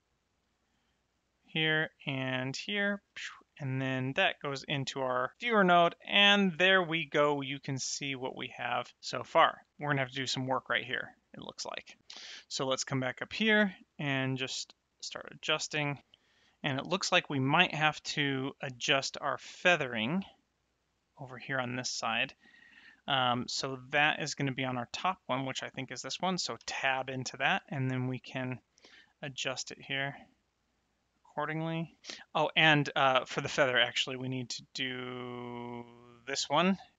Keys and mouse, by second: 2.0 click, 3.8 ctrl+shift+click, 4.8 middle click, 6.2 middle click, 7.5 middle click, 9.0 middle click, 12.3 click, 13.2 middle click, 14.2 click, 22.7 middle click, 25.1 click, 27.2 middle click, 29.0 click, 36.2 click.